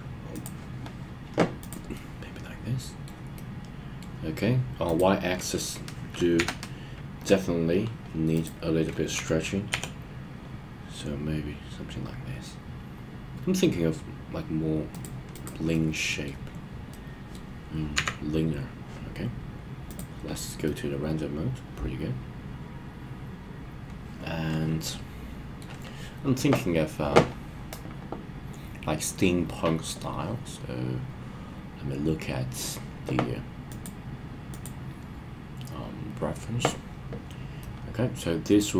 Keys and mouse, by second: 0.3 click, 1.5 click, 1.9-3.0 middle drag, 3.3-4.0 middle drag, 6.3 KP_3, 9.1 s, 9.7 y, 14.9 click, 15.7-16.2 middle drag, 16.9-17.3 middle drag, 17.9 KP_1, 19.9 click, 20.6-25.6 middle drag, 37.6-38.7 middle drag.